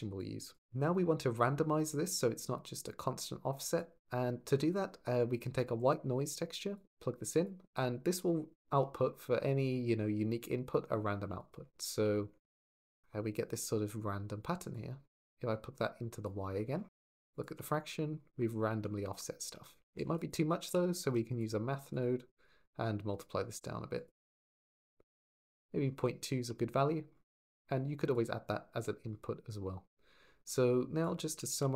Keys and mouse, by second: 0.0 click, 3.6 click, 7.2 click, 11.2 ctrl+shift+click, 11.9 shift+drag, 16.3 click, 17.1 ctrl+shift+click, 18.5 shift+middle drag, 19.7 shift+a, 21.7 click, 22.3-23.0 drag, 24.2 click, 24.9 click, 25.0 middle click, 27.9 click, 30.8 drag, 31.2 g, 31.4 x.